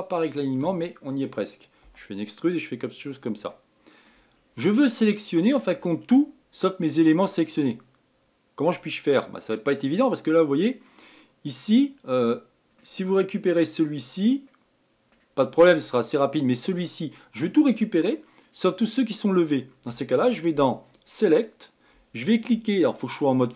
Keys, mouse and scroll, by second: 0.8 shift+click, 2.4 e, 4.0 middle click, 4.9-5.2 scroll down 2, 5.2 middle click, 6.0-7.3 scroll up 3, 7.3 click, 9.5-12.4 middle drag, 14.4 click, 15.0-16.5 middle drag, 16.5-17.0 scroll down 1, 17.0 click, 21.4-23.5 drag.